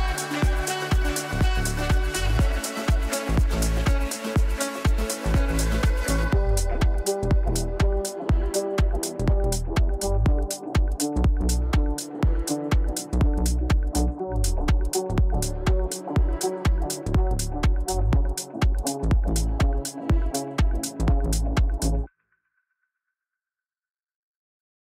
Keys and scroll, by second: 12.8 Delete.